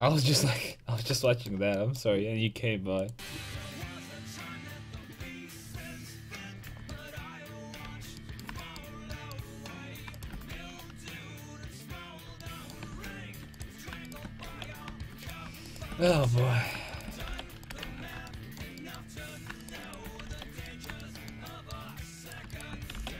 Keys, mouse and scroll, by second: 0.7-1.9 middle drag, 6.7 Tab, 7.8 a, 9.9-12.4 right drag, 10.6 alt+m, 12.4 a, 12.9 ctrl+z, 13.2 ctrl+z, 13.6-17.4 drag, 14.5 alt+m, 16.1 alt+m, 17.3 alt+m, 17.9 ctrl+x, 20.5 alt+m, 22.9 alt+m.